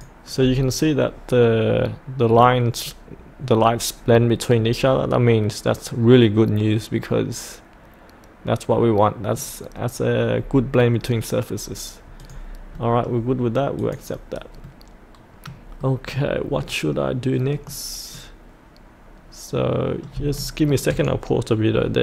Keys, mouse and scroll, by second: 2.1-9.6 middle drag, 9.6 scroll up 1, 12.2 click, 12.8 middle click, 13.8 click, 14.6 middle click, 16.4-16.9 scroll down 1, 16.9-20.2 middle drag, 20.3 shift+middle click.